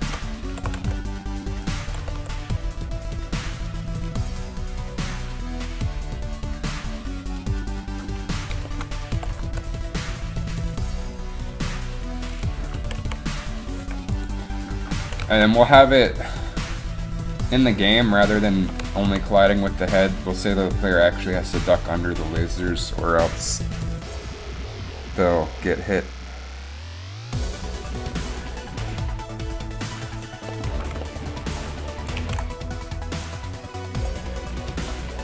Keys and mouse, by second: 0.6 r, 0.7 r, 1.9 r, 2.0 r, 9.3 r, 12.9 a, 13.1 a, 13.9 i, 15.2 a, 30.7-32.1 middle drag, 32.1 click, 32.3 alt+a.